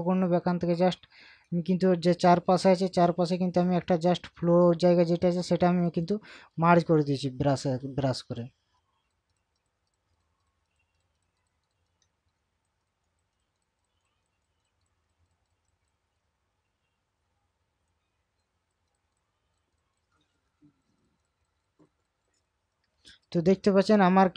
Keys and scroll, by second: 23.6 ctrl+KP_Subtract.